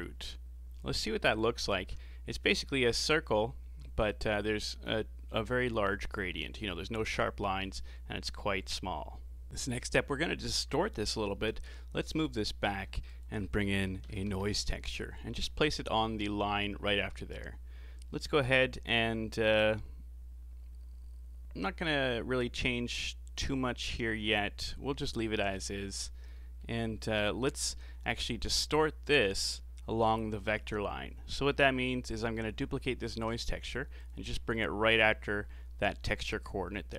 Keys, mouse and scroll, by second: 1.3 ctrl+shift+click, 2.3-3.0 scroll up 3, 9.5-9.8 scroll down 4, 9.8 click, 11.3 g, 12.4 middle click, 12.9 shift+a, 16.1-17.1 scroll up 14, 17.1-20.1 middle drag, 25.6 click, 26.3-26.8 middle drag, 26.8 scroll down 3, 27.1-27.5 middle drag, 27.5-27.8 scroll down 4, 27.8-30.9 middle drag, 32.3-33.1 middle drag, 33.1 shift+d, 34.5-36.4 middle drag, 36.4-36.9 drag.